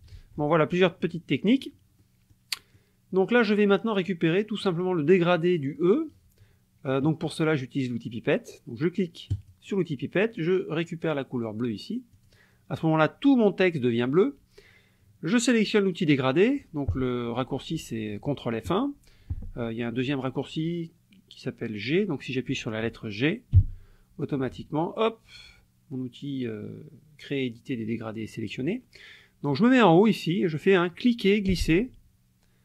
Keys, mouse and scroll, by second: 0.1 ctrl+z, 0.7 ctrl+click, 1.5 click, 2.0-2.5 drag, 2.6 click, 9.3 click, 12.1 click, 23.5 g, 30.6-32.6 drag.